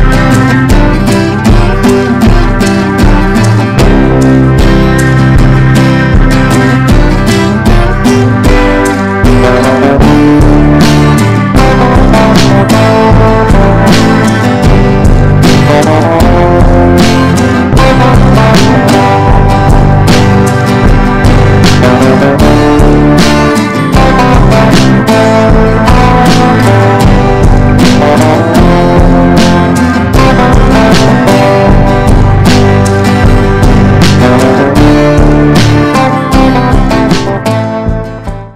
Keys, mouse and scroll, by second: 0.4 click, 2.5 right click, 2.8-7.4 drag, 8.2 ctrl+g, 10.1 click, 12.4-12.9 typing, 18.4 click.